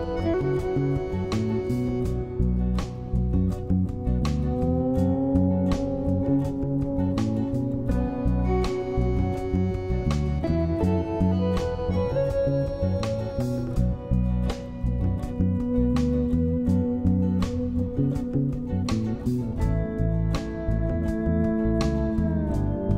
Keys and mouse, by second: 1.7 ctrl+], 1.8 ctrl+z, 1.8-4.9 drag, 5.1 middle click, 6.3 ctrl+z, 6.8 ctrl+z, 6.9 ctrl+z, 8.0 [, 8.5 middle click, 9.1 middle click, 9.7 shift+middle click, 10.8 middle click, 11.3 shift+middle click, 12.0 shift+click, 12.7 click, 12.9 ctrl+z, 13.7 click, 14.7 drag, 15.6-15.9 drag, 16.1 click, 16.3 click, 16.8 click, 18.0 ctrl+z, 18.0 ], 18.1 ], 18.2 click, 19.5 click, 20.3-22.7 typing, 20.5 click, 21.5 click, 21.9 ctrl+z, 21.9 click, 22.7 click.